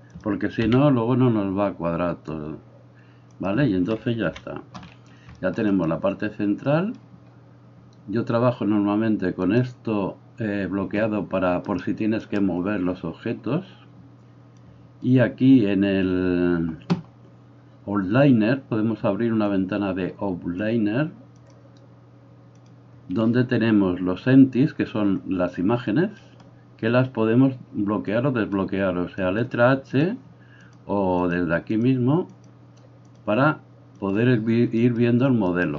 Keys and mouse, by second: 0.7 g, 4.3 KP_1, 9.5-29.4 drag, 11.8-29.3 right drag, 30.6 click, 31.7 click, 32.4 click, 33.9 click, 35.5 right click.